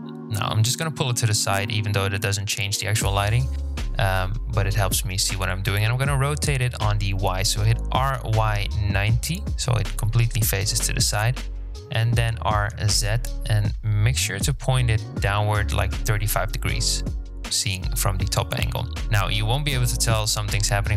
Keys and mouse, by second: 1.8-2.6 shift+drag, 3.7 r, 8.2 r, 16.4 KP_1, 17.5 g, 20.4-20.9 drag.